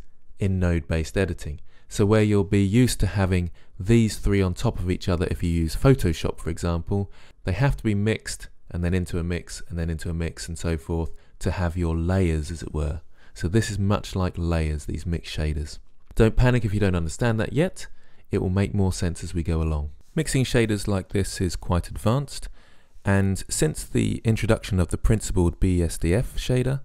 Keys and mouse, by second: 25.2-26.8 drag.